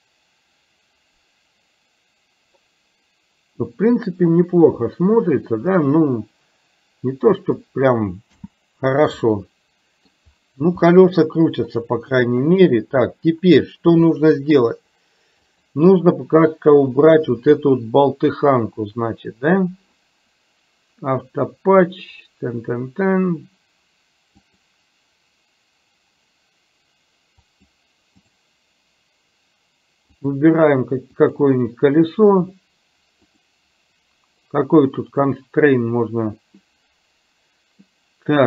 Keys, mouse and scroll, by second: 8.4 space, 9.4-10.2 middle drag, 10.9-11.4 middle drag, 12.1 middle click, 14.2 middle click, 15.5 click, 24.5 click, 27.6 click, 30.2 click, 31.4 click, 33.4-38.4 drag.